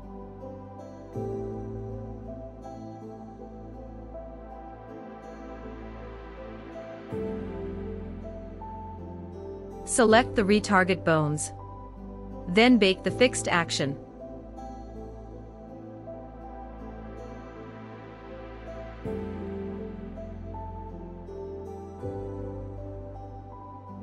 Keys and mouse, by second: 15.8 right click.